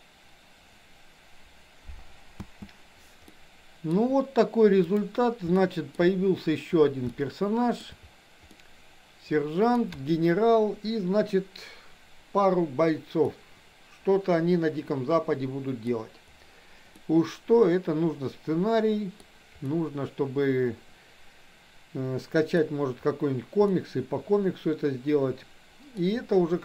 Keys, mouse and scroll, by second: 2.4 space, 3.3-4.0 middle drag, 4.9 click, 5.5 scroll up 1, 5.8 shift+middle click, 7.0-7.8 shift+middle drag, 7.0 scroll up 1, 7.8 scroll down 1, 8.5 scroll up 1, 8.7-9.8 middle drag, 13.3-15.9 middle drag, 17.0-19.2 middle drag, 19.8-22.5 middle drag, 22.5 scroll down 1, 23.9-25.9 middle drag.